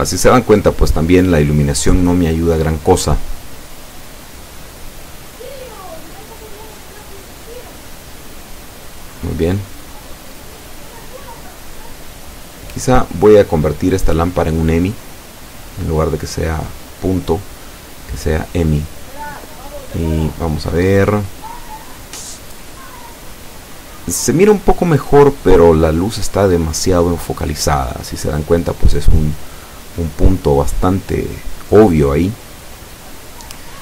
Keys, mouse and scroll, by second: 16.2 Escape, 16.6 scroll down 1, 16.9-17.6 middle drag, 17.6 scroll down 2, 18.2-18.7 middle drag, 18.7 scroll down 2, 20.1 right click, 24.1 click, 25.0-25.3 scroll down 2, 25.3-26.5 middle drag, 27.0 click, 28.4 F12.